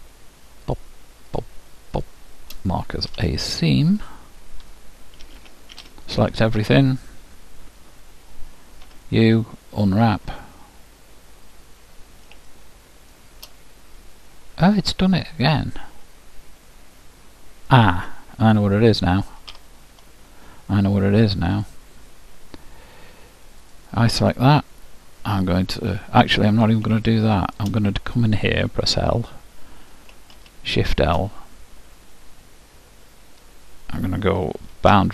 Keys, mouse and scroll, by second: 3.1 ctrl+e, 5.3 a, 5.7 a, 8.9 u, 10.6-17.3 middle drag, 19.5 ctrl+z, 21.5-23.4 drag, 23.6-25.6 drag, 27.1-29.0 middle drag, 29.0 l, 30.4 shift+l, 34.9 shift+'.